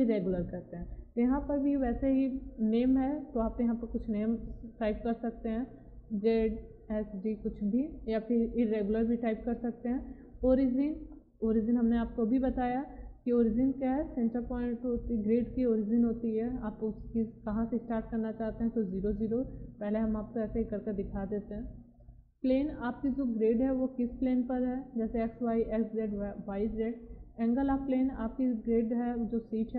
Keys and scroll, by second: 5.8 z, 7.3 d.